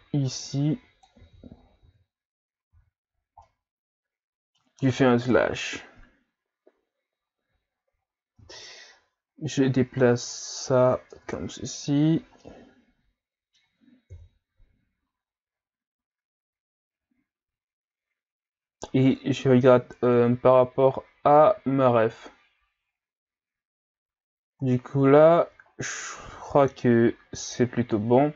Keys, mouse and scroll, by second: 1.2 z, 1.6 scroll down 2, 1.8 Tab, 2.7 a, 3.0-3.4 scroll down 2, 3.4-5.3 middle drag, 5.3 KP_Divide, 7.0-7.7 scroll up 1, 7.7 scroll down 2, 8.0-8.4 scroll up 2, 8.4 Tab, 9.4 click, 11.1 Tab, 12.4-14.1 middle drag, 14.1 KP_3, 15.2-16.4 scroll down 1, 16.4-18.3 scroll down 1, 25.7-26.1 scroll up 3, 26.1-28.3 middle drag.